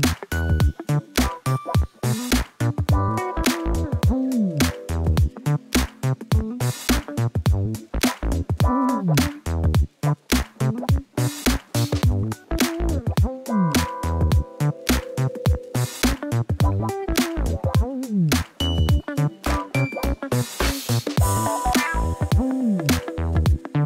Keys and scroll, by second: 0.4 ., 0.5 2, 0.6 5, 0.7 Return, 3.0 Tab, 6.4 Tab, 13.3 i, 18.6 u, 21.1 u, 21.8 Tab, 22.6 Tab, 23.1 u.